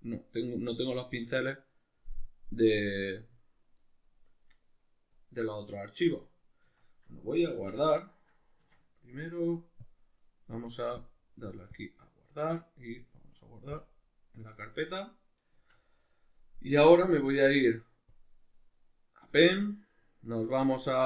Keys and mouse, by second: 5.2-21.0 drag, 6.8 Escape, 7.6 Tab, 15.6 Tab.